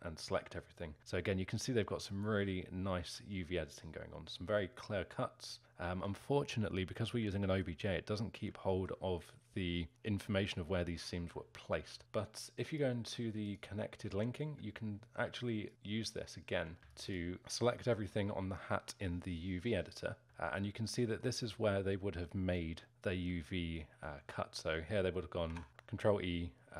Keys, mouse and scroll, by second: 5.6-6.3 scroll up 4, 6.3-13.5 alt+middle drag, 13.5 click, 14.4 2, 15.7 click, 17.1 alt+shift+click, 20.4-21.5 alt+middle drag, 21.5-23.4 scroll up 1, 23.4-25.7 alt+middle drag, 25.7 ctrl+e, 25.7 ctrl+z.